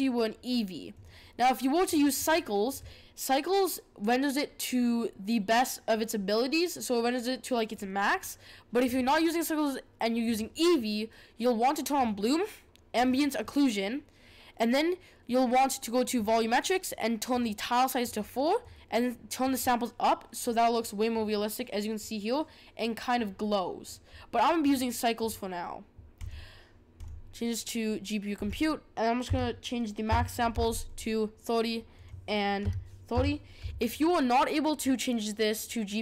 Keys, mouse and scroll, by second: 0.9-3.8 drag, 8.8-12.1 drag, 12.9 click, 16.1-30.9 drag, 31.9-33.9 drag.